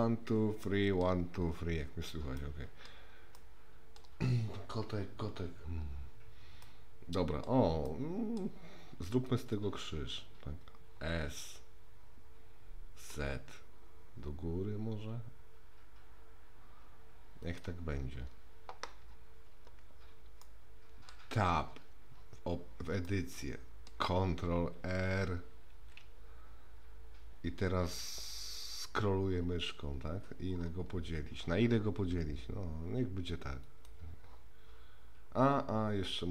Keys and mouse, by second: 0.0-1.0 middle drag, 2.4-2.9 middle drag, 3.3 middle click, 6.6-7.5 middle drag, 7.8 middle click, 9.2 click, 9.5 click, 11.1 s, 20.4-21.1 middle drag, 21.5 Tab, 23.0 middle click, 25.7 ctrl+r.